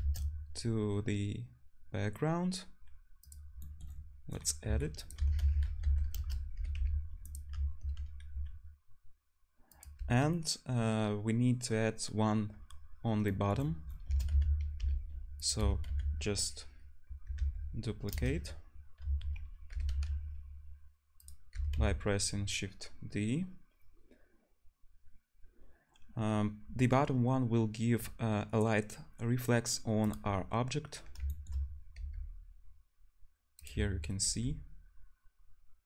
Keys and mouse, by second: 0.0 shift+a, 3.0-3.7 drag, 3.8 click, 4.7 s, 5.2 r, 5.8-8.3 drag, 6.5 g, 7.5 `, 8.3 s, 13.6-14.0 drag, 14.1 shift+d, 14.8-19.9 drag, 15.6 r, 19.0 `, 19.7 g, 20.8 click, 21.5 g, 21.9-33.6 drag, 32.0 g, 33.6-35.8 middle drag, 34.3 g.